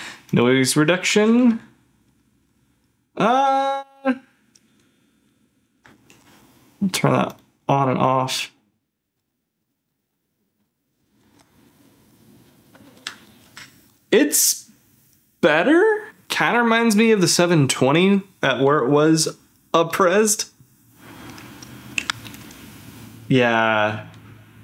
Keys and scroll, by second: 1.4 ctrl+f, 6.1 ctrl+f, 7.9 ctrl+f, 9.2 ctrl+z, 9.9 ctrl+shift+z, 10.5 ctrl+z, 11.2 ctrl+shift+z, 12.8 ctrl+shift+z, 13.3 ctrl+z, 20.6 ctrl+f, 22.0 ctrl+f.